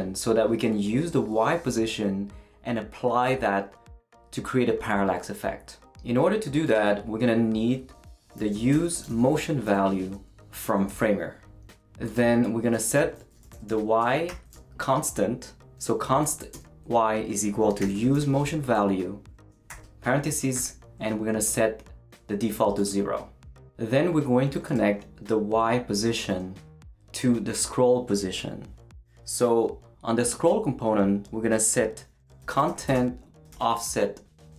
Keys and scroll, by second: 8.5-9.5 typing, 9.7 Return, 12.9 Return, 13.0-14.5 typing, 16.2 =, 16.5 space, 17.6-18.6 typing, 19.7 shift+9, 20.5 shift+0, 32.2-34.0 typing.